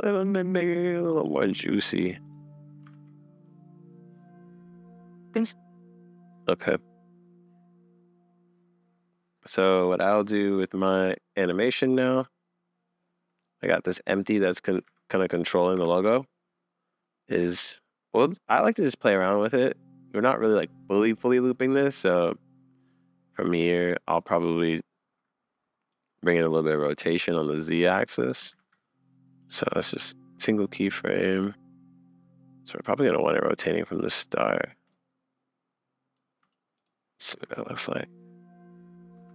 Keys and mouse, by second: 0.2 s, 1.5 s, 2.9 super+s, 3.4 click, 4.9 middle click, 5.1 middle click, 5.3 middle click, 6.2 click, 6.6-9.5 middle drag, 10.8 click, 14.8 r, 18.6-20.1 middle drag, 21.4 middle click, 23.5 click, 26.0 click, 26.5 super+z, 27.0-28.3 shift+drag, 28.5 super+z, 29.4 click, 30.9-32.2 middle drag, 33.2 click, 35.0-36.4 shift+middle drag, 37.3 space, 39.2 space.